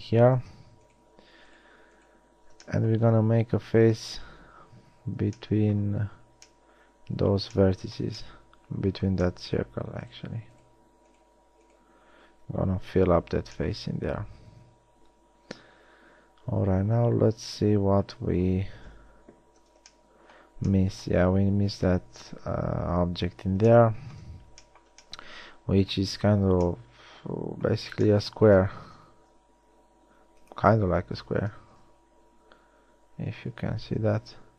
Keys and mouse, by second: 2.9 middle click, 4.6 f, 5.8 middle click, 6.2 a, 13.1 f, 13.6 a, 19.0 KP_1, 19.7 z, 26.3 z, 29.2 ctrl+Tab, 32.0 KP_1, 33.9 z.